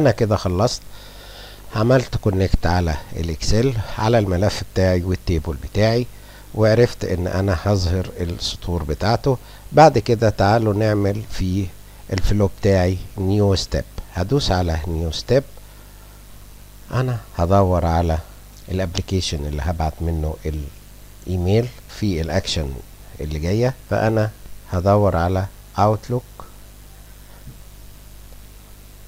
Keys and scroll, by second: 25.8 o, 26.5 u, 27.0 o.